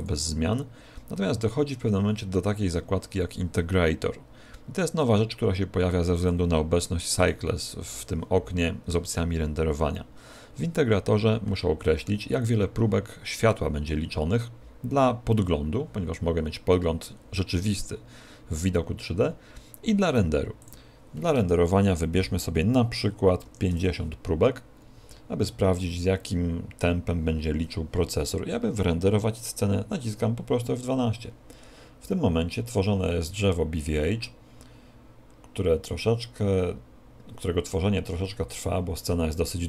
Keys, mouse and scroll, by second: 0.3 click, 7.5 click, 20.9 click.